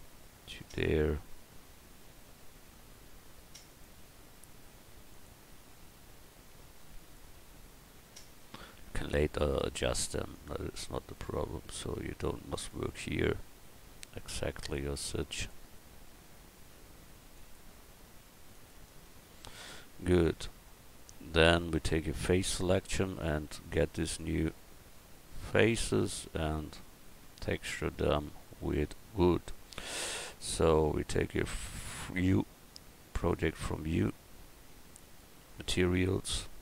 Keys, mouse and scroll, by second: 8.1 middle click, 22.1 click, 23.1 right click, 24.3-29.7 right drag, 31.9 u, 35.0-36.6 drag.